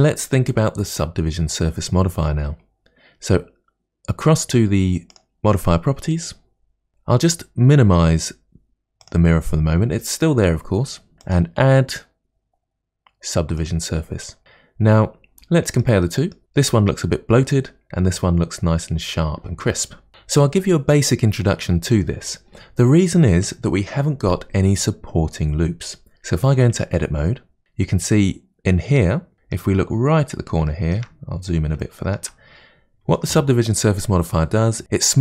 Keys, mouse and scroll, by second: 5.1 click, 9.0 click, 11.2-14.2 drag, 14.6-17.5 middle drag, 26.8 Tab, 27.4-29.0 scroll up 4, 29.3-31.3 middle drag, 31.3-31.8 scroll up 3, 31.8-34.8 shift+middle drag.